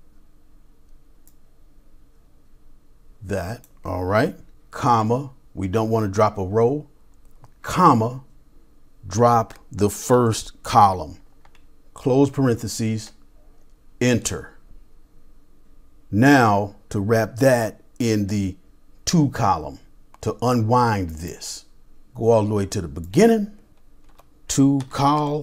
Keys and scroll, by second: 1.3-2.8 typing, 4.8 typing, 7.4 typing, 10.1 typing, 12.2 typing, 23.8-25.4 typing.